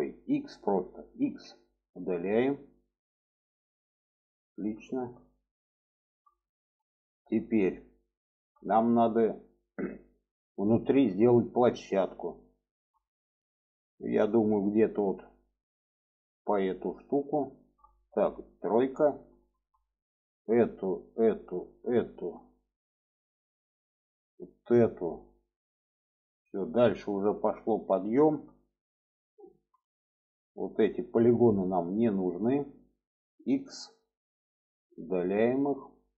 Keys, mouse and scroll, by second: 1.0 x, 2.7 middle click, 3.7 alt+middle click, 4.7 shift+middle click, 5.8 shift+middle click, 6.7 shift+middle click, 7.4 shift+middle click, 8.0 shift+middle click, 8.5-9.5 middle drag, 9.8 middle click, 10.5 shift+middle click, 11.6 shift+middle click, 12.1 alt+middle click, 12.9 shift+middle click, 14.0 shift+middle click, 15.3 shift+middle click, 16.7 shift+middle click, 18.4 3, 19.1 middle click, 20.0 click, 20.8 click, 21.5 shift+click, 22.3 shift+middle click, 24.0 shift+click, 27.7 shift+middle click, 28.7 middle click, 30.7-31.1 shift+drag, 32.1-32.5 shift+drag, 34.2 x, 35.7 middle click.